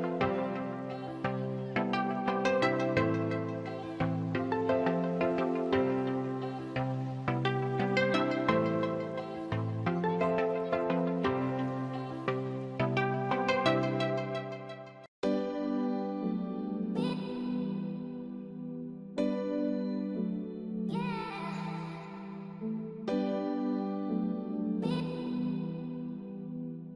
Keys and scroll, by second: 10.8 ctrl+-, 11.7 ctrl+-, 13.5 ctrl+-, 16.3 ctrl+alt+z, 20.6 ctrl+-, 22.9 ctrl+-, 23.8 ctrl++, 24.4 ctrl+-.